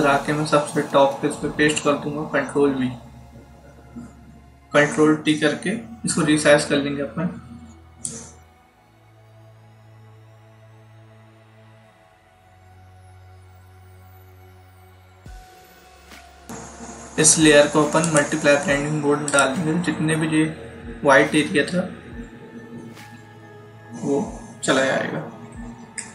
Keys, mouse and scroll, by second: 2.6 ctrl+v, 6.3 ctrl+t, 8.0 click, 13.0 click, 17.9 click, 20.5-20.8 alt+scroll up 1, 22.8-23.7 ctrl+scroll up 2, 24.9 ctrl+=, 25.3-26.1 typing.